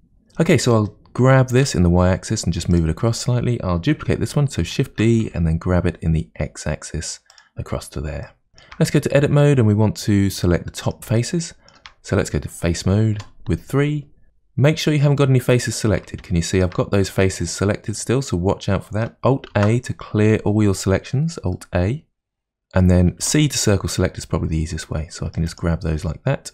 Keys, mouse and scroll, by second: 0.6 g, 3.2 click, 4.9 shift+d, 8.2-9.5 shift+middle drag, 9.5-10.2 scroll up 5, 10.4-13.1 middle drag, 13.1 3, 14.3-19.5 middle drag, 19.5 alt+a, 21.5-23.1 middle drag, 26.1-26.5 scroll down 1.